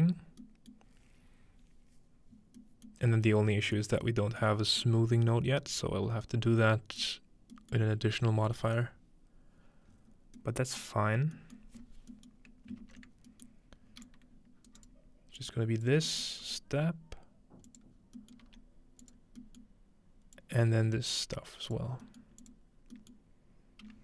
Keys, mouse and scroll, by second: 0.7-2.1 middle drag, 2.6-6.5 scroll up 2, 3.0-3.3 middle drag, 3.8 middle click, 7.5 middle click, 7.9-9.3 middle drag, 8.3-9.3 scroll down 1, 9.3-10.0 scroll up 3, 10.6-11.0 scroll up 2, 10.8-11.4 middle drag, 11.0-14.7 scroll down 3, 11.6 middle click, 12.3 middle click, 14.1-14.9 drag, 14.7 right drag, 15.4-16.1 drag, 16.4 g, 17.7 click, 18.0 scroll down 1, 18.4 g, 19.0 click, 20.4-21.9 drag, 22.4 click, 22.8 scroll down 1, 23.9 scroll up 1.